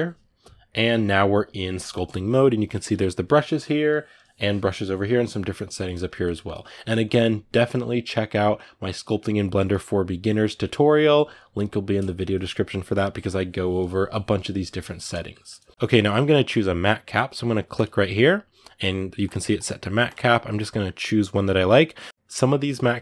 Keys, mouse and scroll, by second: 0.7-17.5 ctrl+middle drag, 17.5-19.8 drag.